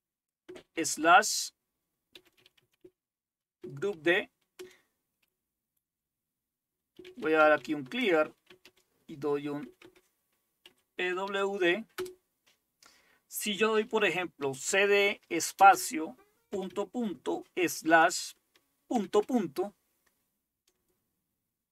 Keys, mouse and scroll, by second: 0.8 typing, 1.9-3.9 typing, 4.6 Return, 6.7-12.8 typing, 14.4-16.7 typing, 17.7 typing, 19.0 typing.